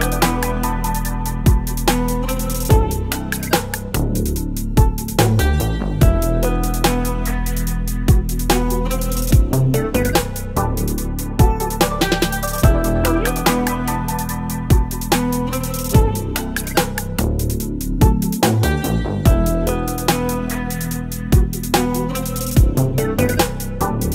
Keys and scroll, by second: 0.0-1.4 typing, 2.5 space, 3.6-9.3 typing, 10.8 space, 11.5 space, 12.2 space, 13.2 space, 13.6 space, 14.6 space, 15.1 space, 16.4-19.0 typing, 20.8-23.1 typing.